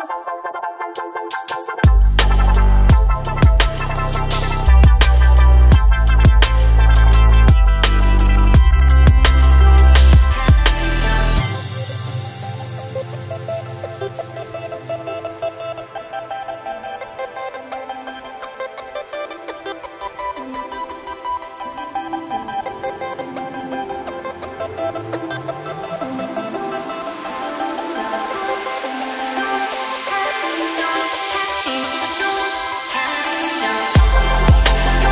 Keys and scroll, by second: 0.2 shift+s, 10.3 r, 12.2 KP_9, 13.1 Return, 22.9 shift+s.